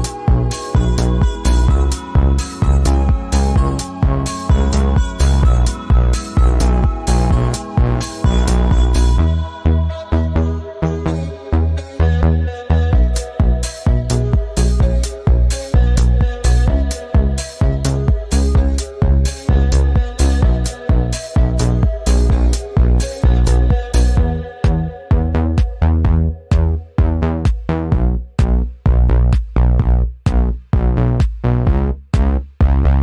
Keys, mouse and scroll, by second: 0.1-6.1 drag, 6.1 v, 6.3-8.3 drag, 8.4-11.1 drag, 11.1-16.5 alt+drag, 16.5 v, 17.1 click, 18.1 alt+scroll down 2, 18.8-19.5 alt+scroll up 2, 19.6 alt+scroll down 1, 19.8 scroll up 1, 20.0 space, 20.3 click, 20.3 space, 21.4-23.1 drag, 23.1 click, 23.5 ctrl+2, 24.0-25.7 drag, 25.7 ctrl+alt+2, 26.4 click, 27.7 ctrl+2, 28.1 click, 28.9 right click, 30.1 click, 31.6 click, 31.8 ctrl+z, 32.5 click.